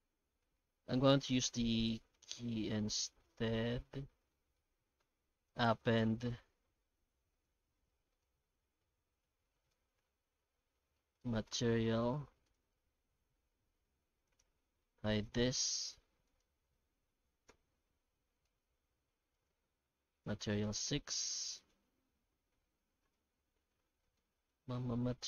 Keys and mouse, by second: 4.3-5.8 shift+middle drag, 14.3-14.6 right drag, 14.6-15.1 middle drag, 15.5 right click, 16.3 right click.